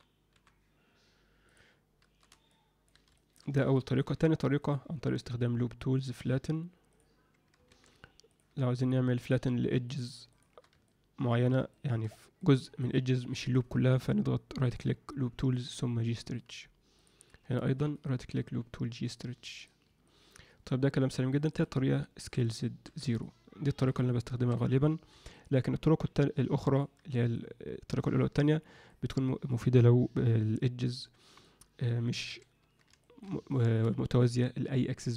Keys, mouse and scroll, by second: 2.5 alt+middle click, 3.1 alt+shift+middle drag, 3.8 ctrl+alt+middle click, 4.6-6.9 right drag, 7.6 ctrl+z, 8.2 click, 9.8 shift+click, 10.8 alt+middle click, 11.7 alt+shift+middle click, 12.4 alt+middle click, 13.3 alt+middle click, 14.5-16.1 right drag, 17.5 shift+click, 18.0-19.6 right drag, 20.0 alt+middle click, 21.3 click, 21.5 click, 22.2 s, 23.9 click, 24.3 s, 26.1 alt+middle click, 27.3-28.4 alt+middle drag, 28.8-31.4 middle drag, 31.8 middle click, 33.0 alt+shift+middle click, 33.5 ctrl+alt+middle click.